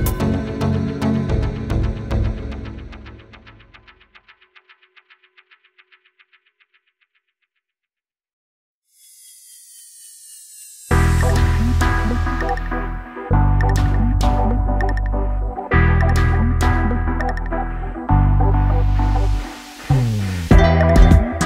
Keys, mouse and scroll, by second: 0.4 space, 0.7-1.4 click, 1.6 space, 1.8-2.3 ctrl+click, 2.4 space, 2.5-2.9 click, 3.4 shift+Right, 6.6 space, 6.9 click, 7.0-7.6 space, 7.4 space, 7.9 ctrl+space, 8.0-8.9 ctrl+click, 8.3 ctrl+space, 8.6 ctrl+space, 8.9-9.4 click, 9.2 space, 10.1-11.3 drag, 13.0 space, 13.2-13.6 click, 13.5 space, 13.9-14.8 ctrl+click, 14.3 ctrl+space, 14.8 space, 14.8-15.3 click, 15.1 space, 15.6-16.6 drag, 17.5 Left, 20.3 Right.